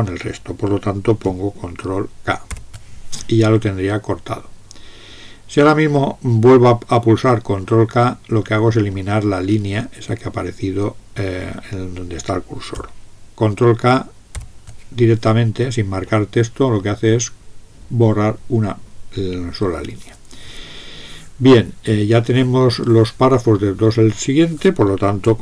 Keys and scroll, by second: 2.5 ctrl+k, 14.3 ctrl+k.